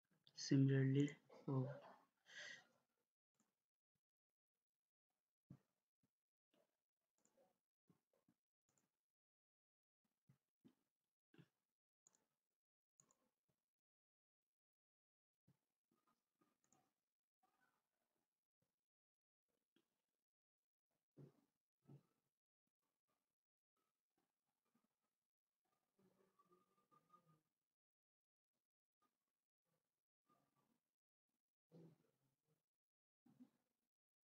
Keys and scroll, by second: 10.5 Escape.